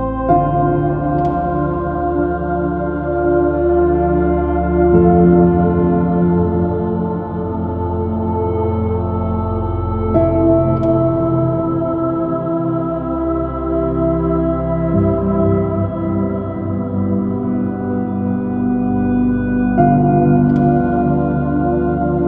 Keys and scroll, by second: 7.8 space, 13.2 BackSpace, 13.5 space, 14.3 super+i, 14.7 super++, 15.0 super+-.